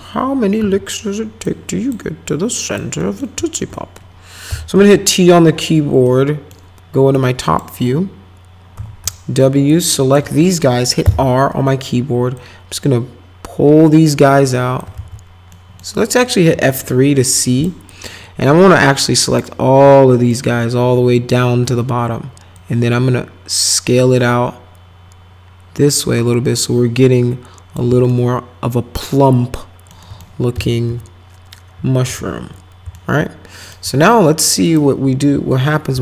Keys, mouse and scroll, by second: 0.6 r, 1.4 click, 2.3 click, 3.0 middle click, 4.2-5.2 typing, 5.1 middle click, 6.1 middle click, 7.2 click, 8.8 w, 9.7 ctrl+click, 10.5 right click, 11.0 r, 12.4-14.8 drag, 15.0 ctrl+z, 15.5 middle click, 16.5 F3, 17.4 click, 17.9-19.4 drag, 20.3 ctrl+click, 22.5-27.7 drag, 28.1-29.9 alt+middle drag, 30.0 alt+middle click, 30.5 F3, 30.9 F4, 31.8 F4, 32.1 F4, 32.9 alt+middle click, 34.7 click, 35.9 t.